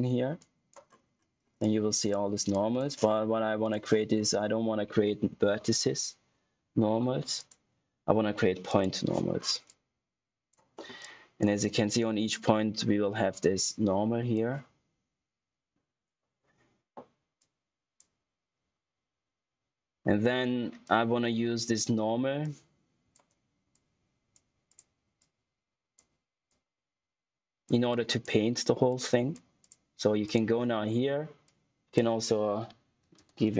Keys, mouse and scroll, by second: 0.3 click, 0.8-1.4 scroll up 1, 1.5 click, 2.0 right click, 2.4 click, 7.3 click, 9.3 scroll down 1, 9.6 click, 10.7 middle click, 10.9 click, 17.3 click, 20.8 click, 33.1 shift+n.